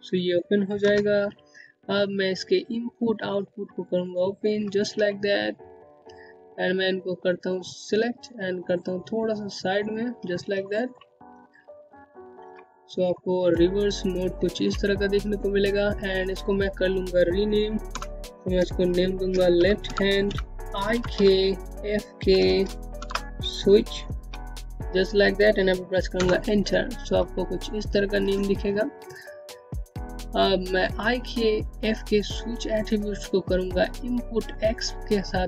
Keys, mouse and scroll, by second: 1.7 click, 4.9-5.3 scroll up 1, 5.3-6.3 scroll down 1, 6.3 click, 9.7 middle click, 10.2-10.8 scroll up 1, 10.8 scroll down 1, 11.2 middle click, 11.7-12.2 scroll up 1, 12.2 middle click, 13.2 scroll down 1, 13.4 alt+middle click, 15.3 click, 17.0 BackSpace, 18.7-20.9 typing, 22.7-25.1 typing, 26.1 Return, 28.6 scroll down 1, 29.0 middle click, 29.2-29.9 typing, 29.5 click, 34.4-35.2 typing.